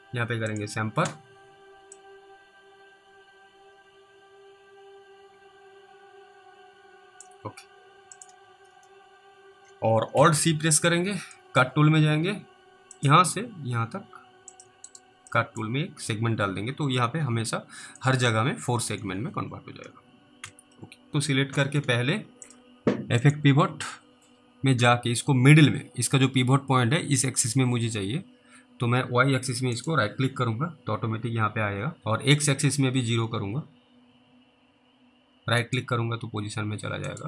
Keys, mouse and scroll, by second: 0.6 click, 2.2 click, 8.2 click, 10.2 alt+c, 10.7-11.3 scroll up 1, 11.6 middle click, 11.7 scroll up 1, 13.0 click, 14.9 right click, 15.6 middle click, 18.3 middle click, 19.0 scroll down 1, 20.4-21.0 scroll down 2, 20.4 w, 22.5 click, 29.8 right click, 35.7 right click.